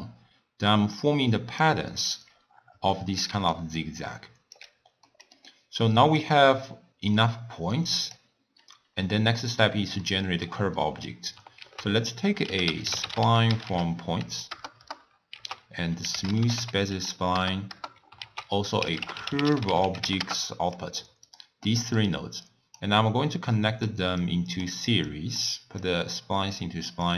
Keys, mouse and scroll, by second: 2.4-2.9 scroll down 1, 2.9 shift+middle click, 3.4 d, 3.6-4.6 right drag, 4.6 d, 5.1-6.3 middle drag, 6.3-8.6 drag, 8.6-9.1 scroll down 3, 9.1-9.4 scroll up 3, 9.4 scroll down 1, 9.5-10.1 scroll up 1, 10.1-11.6 shift+middle drag, 11.6 ctrl+a, 15.4 ctrl+a, 16.4 o, 18.2 ctrl+a, 21.7 scroll up 1, 21.8-22.4 middle drag, 22.4 click, 23.4 click, 24.3-25.1 drag, 25.9-27.1 drag.